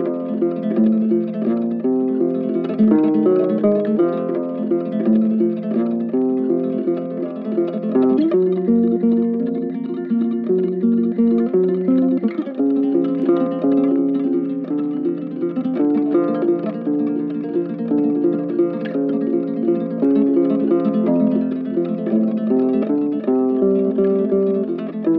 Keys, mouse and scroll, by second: 0.9 ctrl+click, 1.2 ctrl+z, 1.4 shift+click, 9.3 right click, 11.9 right click, 14.5 right click, 15.1 shift+click, 20.8 ctrl+z, 22.0 alt+click, 22.7 alt+click, 23.3 alt+click.